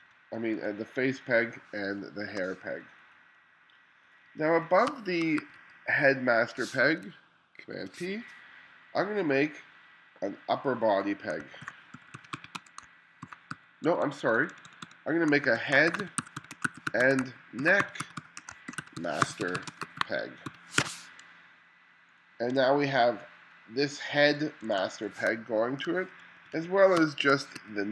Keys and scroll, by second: 0.0-0.6 typing, 2.0 space, 4.3 2, 4.9 space, 5.4 2, 7.6 super+p, 11.4-13.9 typing, 15.6-21.3 typing, 22.6 1, 24.7 1, 25.3 space, 26.4 2, 27.0 space, 27.6 2.